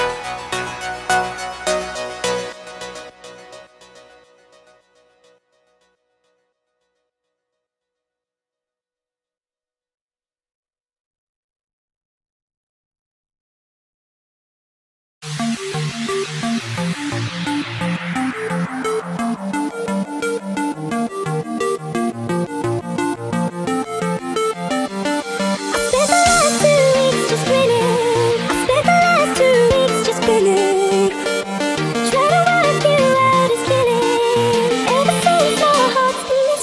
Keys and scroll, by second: 1.2 space, 5.3 space, 14.3 x, 16.1 space, 17.7 z, 18.1 space, 18.2 x, 20.9 z, 23.3-26.4 typing, 27.4-36.4 typing.